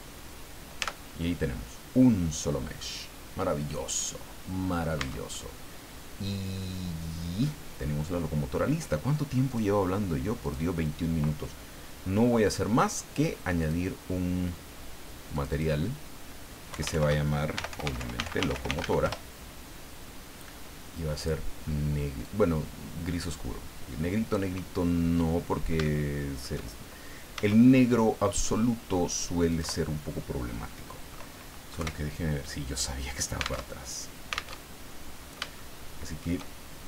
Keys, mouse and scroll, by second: 0.8 Tab, 2.2-2.5 scroll down 2, 2.8-5.0 middle drag, 5.0 Tab, 5.3-7.6 middle drag, 7.8 scroll down 2, 9.5 click, 10.4 click, 12.4 click, 13.6 click, 15.3 click, 16.7 Home, 16.9 shift+End, 17.3-19.3 typing, 21.2 click, 22.2-24.5 drag, 25.4 scroll down 1, 25.8 shift+middle click, 27.3 s, 29.5 click, 31.7 KP_1, 33.6 alt+Tab, 34.5 alt+Tab, 35.2 scroll up 2, 35.5 shift+middle click.